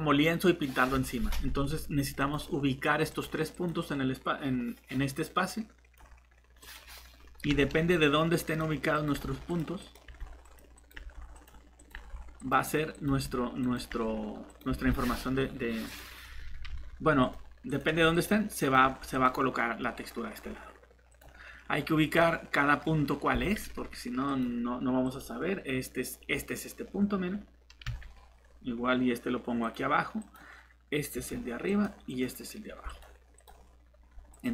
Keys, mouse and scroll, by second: 2.2 click, 19.8 middle click, 21.1 click, 21.9 scroll down 1, 22.2 middle click, 22.8 scroll up 1, 24.3 click, 26.9-27.8 scroll down 1, 29.6 click.